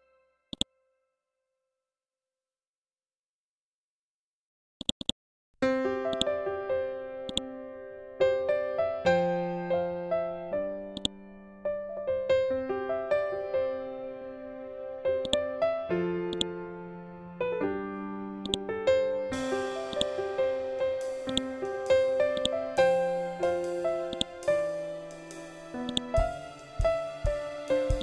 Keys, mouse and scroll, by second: 0.4 scroll down 1, 4.2-8.2 drag, 8.2 scroll up 1, 10.4-13.7 drag, 13.7 scroll down 1, 14.7 shift+click, 15.3 c, 15.8 click, 16.5-17.0 scroll up 1, 17.9 click, 22.6 scroll down 1, 23.6-27.5 drag.